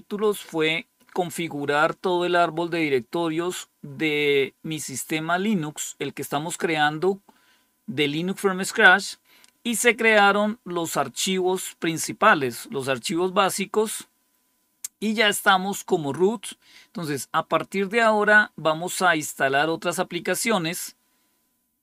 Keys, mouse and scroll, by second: 0.1 click, 18.1-18.9 scroll down 2, 18.9-21.8 scroll up 1.